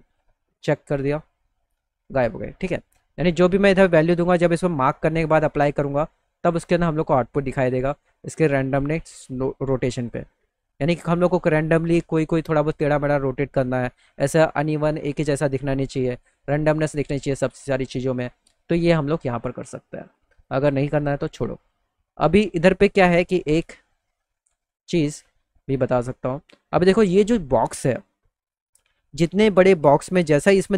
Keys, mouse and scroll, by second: 0.1 click, 4.7 click, 5.9 click, 6.4 click, 7.4-10.2 drag, 20.3 right click, 23.4-24.7 middle drag, 25.1 middle click.